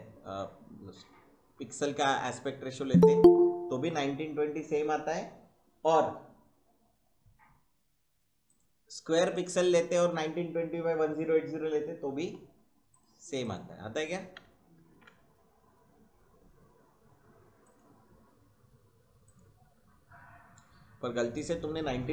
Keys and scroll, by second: 14.8 ctrl+n.